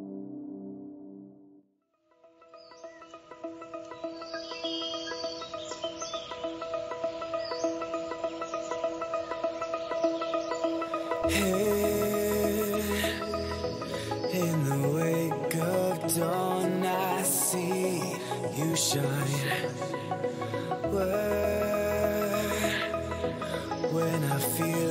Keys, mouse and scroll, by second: 2.8-4.3 middle drag, 5.3 z, 5.9 a, 6.5 z, 7.9 Tab, 9.8 middle click, 13.9-16.4 middle drag, 14.3 Tab, 15.7 Tab, 20.7 z, 22.0 z, 22.4 Tab.